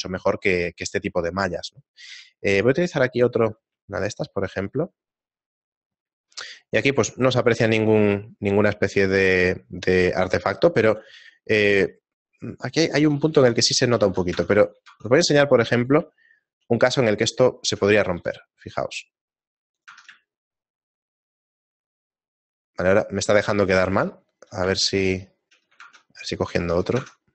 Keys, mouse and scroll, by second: 0.4 shift+middle click, 1.3 shift+middle click, 3.0 click, 4.2 shift+middle click, 12.9 shift+middle click, 13.4 ctrl+Tab, 14.0 ctrl+Tab, 14.8 Tab, 16.2 ctrl+Tab, 16.2 shift+middle click, 17.0 right click, 19.4 shift+middle click, 19.4 g, 20.4 Tab, 20.4 shift+middle click, 23.6 middle click, 24.3 ctrl+middle click, 25.0 shift+middle click, 26.2 ctrl+Tab, 26.8 ctrl+Tab.